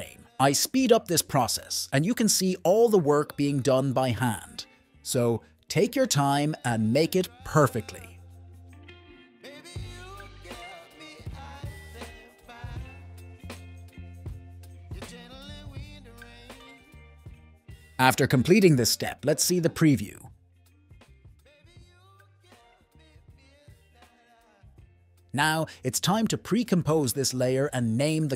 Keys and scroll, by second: 2.0-3.1 typing, 5.6 9, 5.7 Return, 8.1-9.3 typing, 10.4-11.5 typing, 13.0-13.9 typing, 15.1-17.5 typing, 18.7 1, 18.8 Return, 19.4 n, 19.7 space.